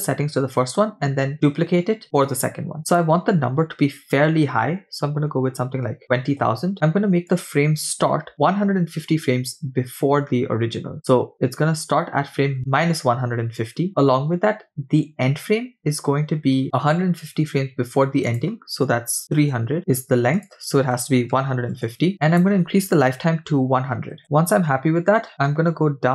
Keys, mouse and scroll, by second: 0.3-1.0 scroll up 2, 2.9-6.4 drag, 5.6 0, 6.0 0, 7.3-11.1 drag, 11.3-13.1 drag, 14.1-16.0 scroll down 2, 18.3-19.8 drag, 19.2 0, 20.4-22.1 drag, 22.2-24.2 drag, 23.8 0, 25.5-26.0 scroll down 5.